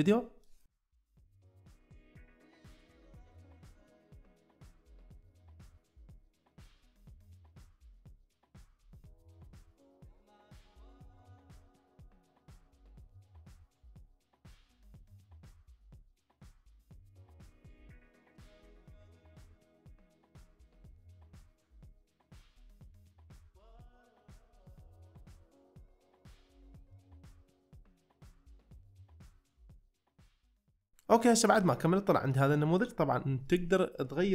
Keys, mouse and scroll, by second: 0.5 middle click, 0.9 middle click, 1.3 middle click, 1.6 shift+middle click, 2.3 middle click, 2.6 middle click, 3.1 middle click, 3.3 2, 3.5 middle click, 3.7 ctrl+z, 4.0 ctrl+z, 4.0 ctrl+x, 4.0 middle click, 4.3 middle click, 4.6 click, 4.9 ctrl+alt+space, 5.1 middle click, 5.5 middle click, 6.0 shift+2, 6.3 ctrl+c, 6.4 ctrl+x, 7.0 ctrl+x, 7.1 middle click, 7.3 middle click, 7.6 right click, 7.6 c, 7.8 ctrl+x, 7.8 middle click, 8.3 ctrl+x, 8.3 middle click, 8.6 middle click, 9.2 middle click, 9.4 click, 9.6 ctrl+x, 9.6 middle click, 9.9 ctrl+x, 9.9 middle click, 10.3 shift+click, 10.5 ctrl+x, 10.6 middle click, 11.0 click, 11.1 ctrl+x, 11.2 middle click, 11.5 ctrl+x, 11.5 middle click, 11.7 c, 12.0 right click, 12.1 ctrl+x, 12.2 middle click, 13.2 ctrl+x, 13.3 middle drag, 13.6 middle click, 13.9 ctrl+x, 13.9 c, 14.0 middle drag, 14.2 c, 14.4 ctrl+x, 14.5 middle drag, 14.9 ctrl+x, 15.0 middle click, 15.5 ctrl+x, 15.7 ctrl+x, 15.7 middle click, 16.0 ctrl+x, 16.1 ctrl+x, 16.2 middle drag, 16.7 ctrl+x, 16.8 click, 17.3 drag, 17.7 ctrl+x, 17.7 drag, 18.1 ctrl+x, 18.1 ctrl+x, 18.1 middle drag, 18.3 ctrl+x, 18.6 ctrl+x, 18.6 drag, 18.8 ctrl+x, 18.8 middle click, 19.2 ctrl+x, 19.3 drag, 19.7 ctrl+x, 19.8 drag, 20.3 ctrl+x, 20.3 click, 20.7 ctrl+x, 20.7 middle drag, 20.9 ctrl+x, 20.9 middle drag, 21.2 ctrl+x, 21.3 ctrl+x, 21.4 middle click, 21.9 ctrl+x, 21.9 middle click, 22.6 ctrl+x, 22.6 click, 22.9 shift+click, 23.1 ctrl+x, 23.1 click, 23.6-24.1 ctrl+x, 23.6 middle click, 24.3 middle click, 24.8 ctrl+x, 25.1 ctrl+x, 25.1 middle click, 25.6 ctrl+x, 25.6 middle click, 25.9 ctrl+x, 25.9 middle click, 26.3 ctrl+x, 26.3 middle click, 26.5 ctrl+x, 26.6 middle click, 27.1 ctrl+x, 27.1 middle click, 27.3 ctrl+x, 27.4 middle click, 27.5 Tab, 27.6 middle click, 27.7 middle click, 28.0 Tab, 28.2 c, 28.5 middle click, 28.6 ctrl+x, 28.7 middle drag, 28.9 drag, 29.5 ctrl+x, 29.6 middle drag, 29.9 middle drag, 30.3 ctrl+x, 30.4 middle drag, 32.3-32.8 middle drag.